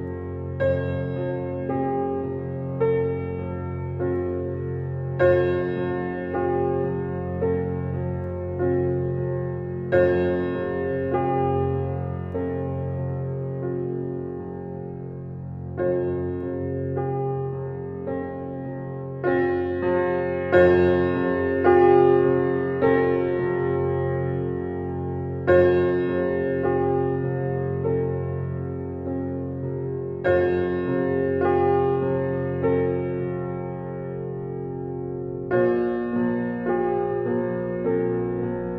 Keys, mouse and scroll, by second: 0.3 click, 0.9 scroll up 5, 1.1 click, 1.7-2.1 drag, 2.4 click, 3.2 click, 3.5 scroll down 5, 3.9-4.4 middle drag, 4.4 scroll down 4, 4.9-5.7 middle drag, 5.7 click, 6.2 click, 6.5-7.5 scroll up 6, 7.5 middle click, 8.6 click, 8.8-9.5 scroll up 20, 9.5-10.3 middle drag, 10.3 scroll up 1, 10.5 drag, 10.7 Tab, 11.3 g, 13.2 Tab, 14.0 click, 14.9 drag, 15.3 click, 16.5 click, 17.3 click, 18.3-20.5 drag, 20.9-22.6 drag, 23.3 click, 23.9 click, 24.7 click, 25.6 click, 26.1 click, 26.7 KP_0, 28.2-29.1 scroll up 1, 29.1-31.0 shift+middle drag, 31.0-31.8 scroll up 21, 32.1-33.2 shift+middle drag, 33.2-34.7 scroll up 7, 34.7 click, 35.1 drag, 35.4-35.9 scroll up 11, 35.9 middle click, 36.9-37.7 scroll down 34, 37.7 middle click, 38.4-38.7 scroll up 6.